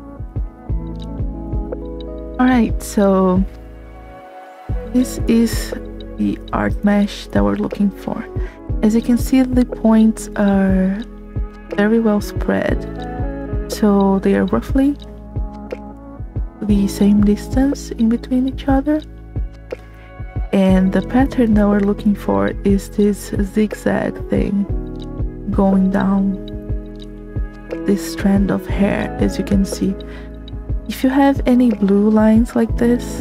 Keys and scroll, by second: 0.0 space, 4.2 space, 21.2 space, 26.9 space, 28.8 s, 28.9 space.